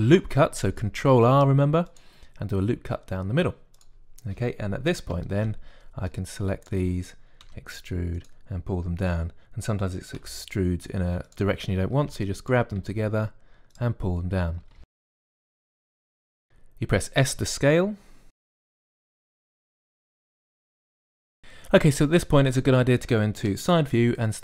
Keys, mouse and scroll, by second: 0.8 ctrl+r, 6.0 a, 6.2 b, 8.3 e, 11.0 g, 12.8 a, 12.9 b, 13.6 g, 14.9-16.2 typing, 18.6-20.7 typing, 20.4 click, 23.2 KP_3.